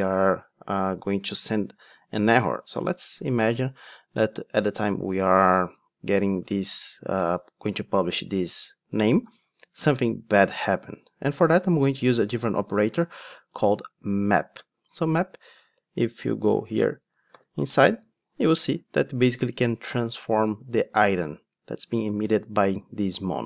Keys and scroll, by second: 13.9 Return, 17.3 super+b.